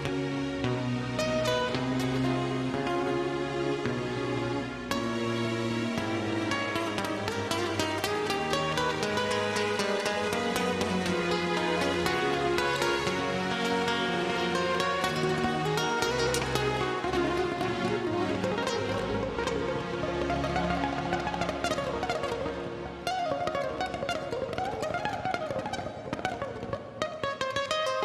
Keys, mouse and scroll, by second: 8.6 scroll down 1, 9.0-9.4 scroll up 1, 9.5 middle click, 11.0 typing, 11.3 Return, 13.2 click, 14.8 scroll up 1, 15.4 click, 16.6 scroll down 1, 18.0 click, 19.6 space, 22.0 f, 23.4 Return, 25.9 KP_2.